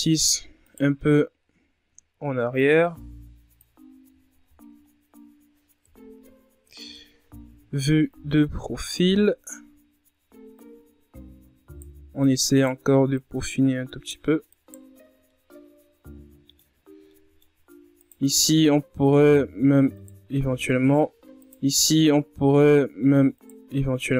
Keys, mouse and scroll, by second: 0.5-1.6 drag, 1.6-2.4 shift+scroll down 5, 2.4 right click, 3.4-3.9 shift+scroll down 4, 4.3-5.8 drag, 5.8 Tab, 6.2-7.6 scroll down 9, 7.6 KP_1, 8.6 KP_3, 9.6-10.9 scroll up 9, 10.9 Tab, 11.2 scroll down 1, 12.3 right click, 14.0 right click, 14.9 right click, 16.3 right click, 16.8 scroll down 4, 17.1-18.5 middle drag, 18.5 scroll up 2, 18.9-19.8 middle drag, 19.8 right click, 20.0-21.7 middle drag, 21.7 shift+right click, 22.1-24.1 middle drag.